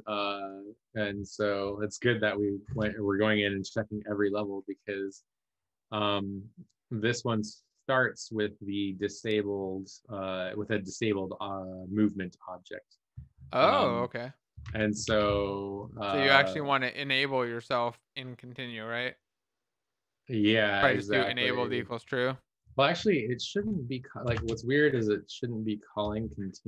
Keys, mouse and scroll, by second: 14.6 shift+Delete, 15.4 ctrl+s.